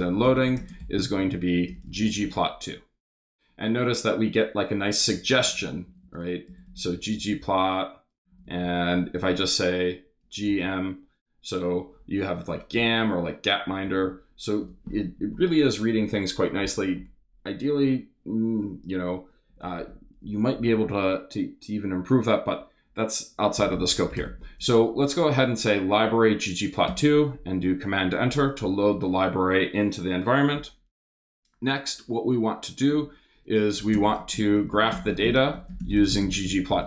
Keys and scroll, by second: 0.0-2.8 typing, 5.1-8.2 typing, 10.0 a, 10.5 m, 12.7 Down, 13.9 BackSpace, 14.6 BackSpace, 23.3-24.7 typing, 26.8 super+Return, 32.9 Return, 33.6 shift+Return, 33.7-36.8 typing.